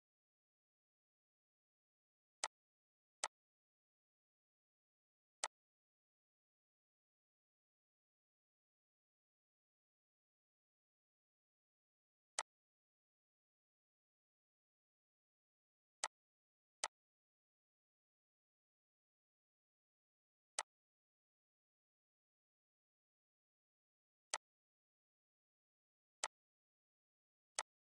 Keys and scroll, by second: 8.6 ctrl+d, 13.3 Delete, 24.1 0, 24.5 1.